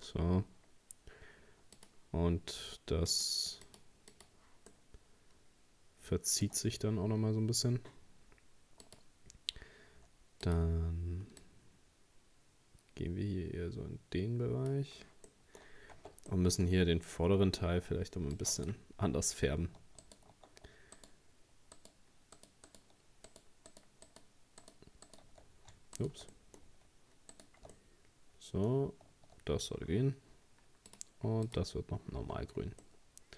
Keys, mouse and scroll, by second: 1.8 click, 3.1-4.7 drag, 4.7-6.5 middle drag, 6.5-7.5 scroll up 2, 8.9-13.5 drag, 15.3 middle click, 15.7 scroll up 1, 16.0 Tab, 16.3-17.9 middle drag, 17.9 ctrl+r, 20.0 alt+shift+right click, 21.0 shift+right click, 21.8 shift+right click, 22.4 shift+right click, 22.7 shift+right click, 23.3 shift+right click, 23.7 shift+right click, 24.1 shift+right click, 24.6 shift+right click, 25.1 shift+right click, 26.0 shift+right click, 26.3-27.3 middle drag, 27.3 shift+right click, 27.8-29.7 middle drag, 29.7-30.0 scroll down 1, 30.9-32.3 drag, 32.3 Tab, 32.5-32.8 scroll down 2, 32.8-33.3 middle drag.